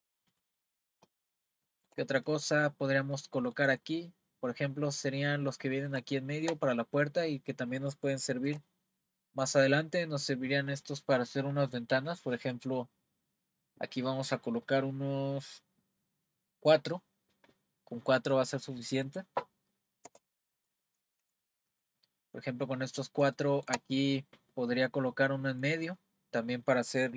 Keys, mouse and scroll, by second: 0.3 click, 0.7 scroll down 1, 1.6 scroll down 4, 1.7-4.1 shift+middle drag, 4.1-4.9 scroll up 3, 6.1-7.9 shift+middle drag, 8.5 r, 20.6 click, 21.7 click, 22.3-22.9 scroll up 4, 23.4-26.9 shift+middle drag.